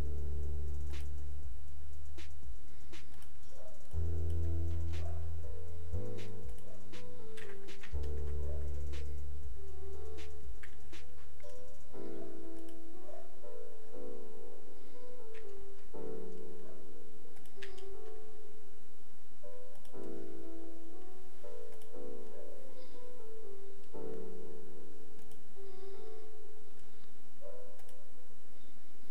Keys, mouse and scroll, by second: 6.5 click, 17.3 click.